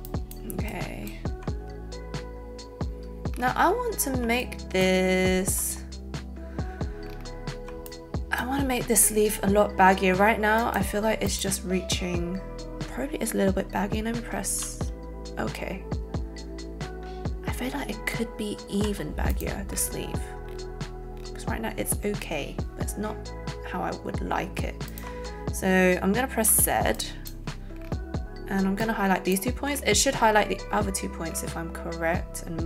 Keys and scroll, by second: 14.5 shift+q, 18.6 shift+q, 26.4 z.